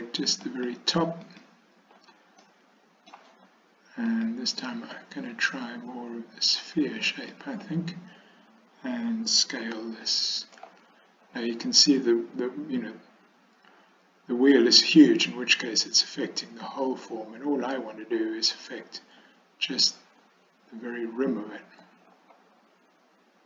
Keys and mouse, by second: 0.5 alt+click, 1.3 alt+click, 2.5 middle click, 4.1-7.7 drag, 9.7 s.